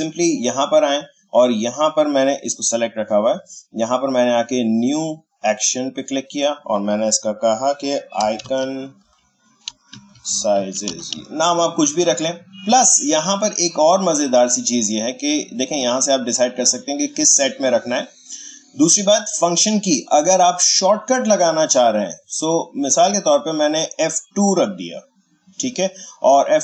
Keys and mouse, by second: 5.4 click, 8.2-11.6 typing, 13.3-16.2 drag, 21.8 click, 24.2 click.